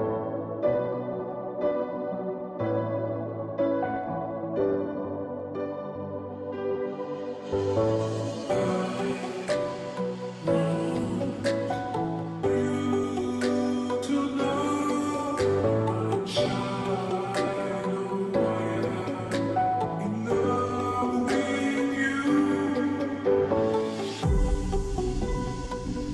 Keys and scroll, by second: 3.1 Return.